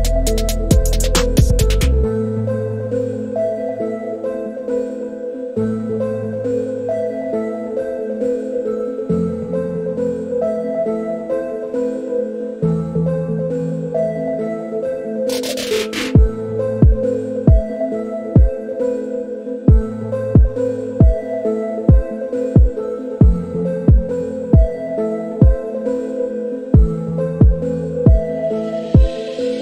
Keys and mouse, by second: 2.0 middle click, 5.9-6.9 middle drag, 7.1-10.9 middle drag, 12.3-13.9 drag, 14.4-15.6 middle drag, 17.3-21.4 drag, 23.1-27.9 drag, 29.0-29.6 middle drag.